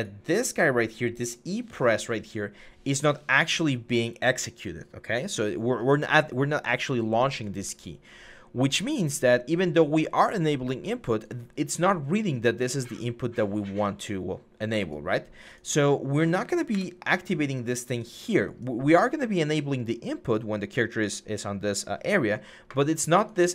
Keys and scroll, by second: 16.5 Delete.